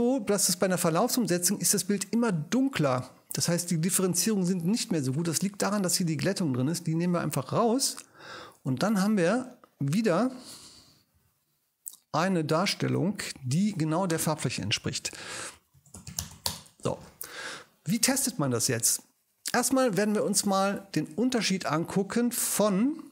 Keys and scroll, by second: 11.1 alt+shift+super+e, 13.4 ctrl+super+i, 15.3-16.8 typing.